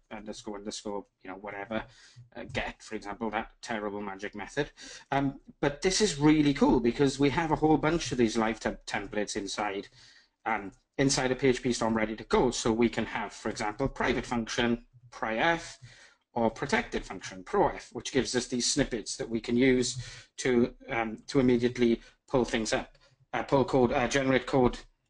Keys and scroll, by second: 1.7 Return, 13.6 Tab.